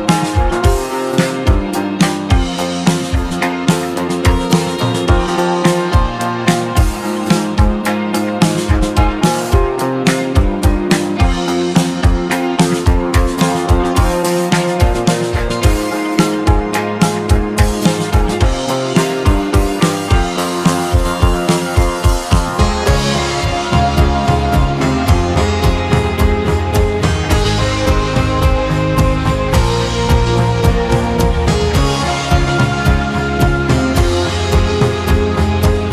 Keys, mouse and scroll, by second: 0.0 p, 1.6 Tab, 2.1 click, 2.9 Tab, 4.6-7.2 scroll down 3, 7.2 a, 8.8 s, 15.1 r, 22.0 g, 25.9-28.4 middle drag.